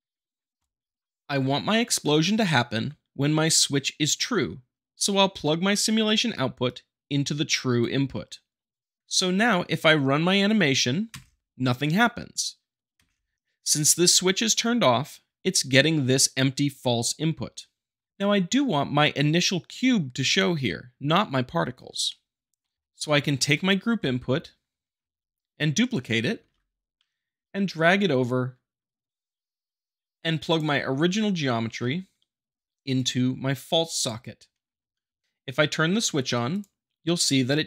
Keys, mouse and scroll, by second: 0.6 click, 6.6-7.6 drag, 13.0 space, 17.4 middle click, 22.1-23.3 shift+middle drag, 23.3 click, 23.4 shift+middle click, 24.7-25.7 middle drag, 26.3 scroll up 2, 26.4 shift+d, 30.4-31.5 drag, 32.9-33.9 drag, 36.5-37.5 drag.